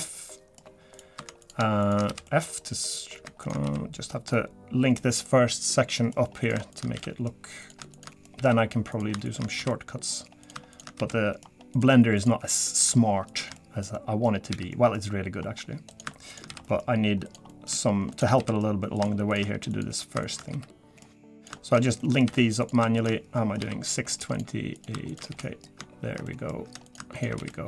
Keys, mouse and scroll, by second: 0.0 middle click, 2.0 shift+click, 2.3 shift+click, 2.8 click, 3.4 shift+click, 3.7 f, 3.7 middle click, 4.3 middle click, 6.7 click, 6.9 f, 7.6 click, 7.9 shift+click, 8.2 middle click, 8.9 click, 9.2 shift+click, 9.6 f, 9.7 middle click, 10.4 click, 10.7 shift+click, 11.0 f, 11.1 middle click, 11.7 click, 12.2 click, 13.3 shift+click, 13.6 middle click, 13.9-14.5 scroll up 3, 13.9 middle click, 14.5 f, 14.7 middle click, 15.4-15.9 scroll down 3, 15.5-15.9 scroll up 1, 16.5 f, 16.6 middle click, 17.3 click, 17.5 middle click, 18.1 shift+click, 18.4 f, 18.5 middle click, 19.0 click, 19.3 shift+click, 19.7 click, 20.2 shift+click, 20.5 f, 20.6 middle click, 21.4 click, 21.7 shift+click, 22.0 middle click, 22.2 f, 22.6 click, 23.0 shift+click, 23.4 middle click, 23.6 f, 23.9 middle click, 24.3 click, 24.8 click, 25.1 shift+click, 25.3 f, 25.4 middle click, 26.3 middle click, 26.9 click, 27.1 shift+click, 27.4 f, 27.5 middle click.